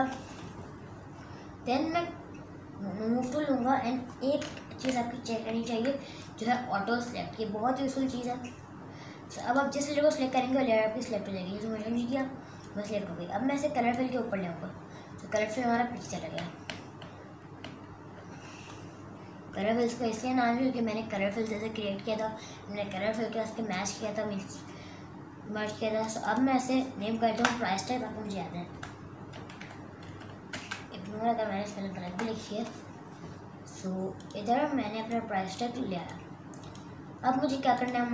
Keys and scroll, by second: 4.9 super+n, 17.2 super+Num_Lock, 17.6 super+KP_Subtract, 27.3 BackSpace, 28.7-31.0 typing, 32.1 Return.